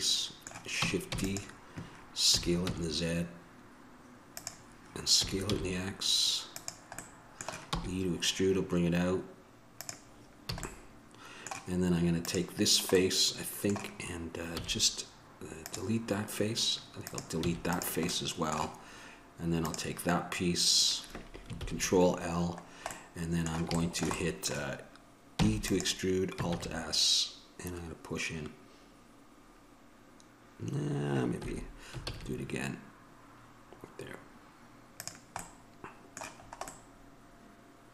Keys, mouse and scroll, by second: 1.4 shift+d, 2.5 s, 5.4 s, 7.3-9.0 middle drag, 7.9 e, 10.0 middle click, 10.7 a, 12.4-16.0 drag, 12.4 right click, 13.5-16.0 middle drag, 17.3-21.0 drag, 17.7 x, 18.5-21.0 middle drag, 21.8 ctrl+l, 24.4 middle click, 26.7 alt+s, 32.3 alt+s, 35.6-37.9 middle drag.